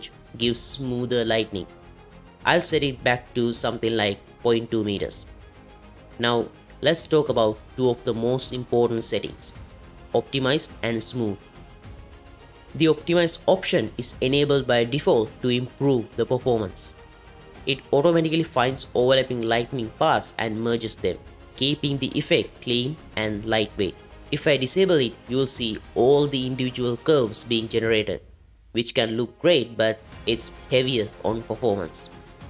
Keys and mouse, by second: 1.0-1.7 middle drag, 2.4-4.6 drag, 13.9-18.8 middle drag.